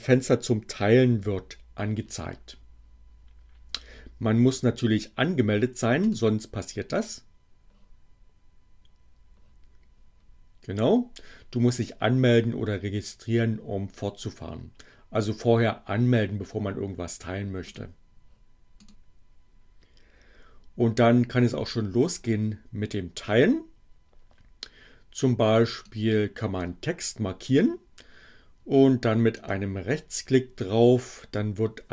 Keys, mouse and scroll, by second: 5.9 click, 17.6 click, 18.8 click, 25.8 click, 29.2 right click.